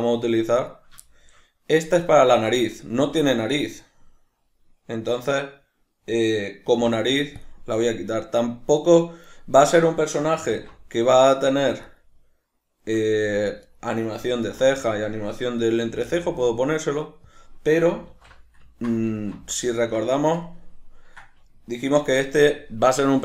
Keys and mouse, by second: 0.6 right click, 1.1-8.8 shift+middle drag, 6.8 x, 8.8 right click, 10.5 alt+q, 11.9 shift+right click, 13.1 middle click, 13.7 shift+right click, 14.4 alt+q, 15.9 g, 17.4 click, 18.1 alt+q, 19.7-23.2 ctrl+middle drag.